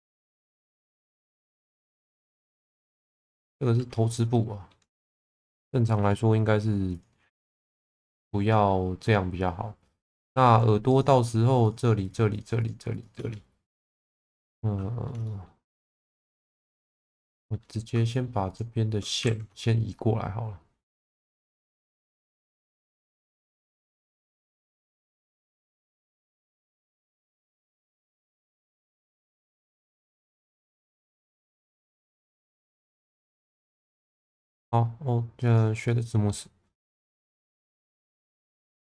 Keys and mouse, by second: 4.2 middle click, 5.0 alt+middle click, 7.0 click, 8.2 shift+middle click, 10.3 3, 11.6 shift+click, 12.0 shift+click, 12.3 shift+click, 12.6 shift+click, 12.9 shift+click, 14.0 shift+middle click, 15.3 shift+middle click, 16.9 2, 17.3 click, 18.5 shift+click, 19.3 ctrl+z, 21.3 1, 21.8 click, 23.2 shift+middle click, 24.8 click, 26.4 shift+middle click, 26.9 shift+middle click, 28.1 click, 28.8 click, 31.2 click, 31.8-33.4 middle drag, 34.1 3, 35.9 middle click, 37.4 3, 37.7 a.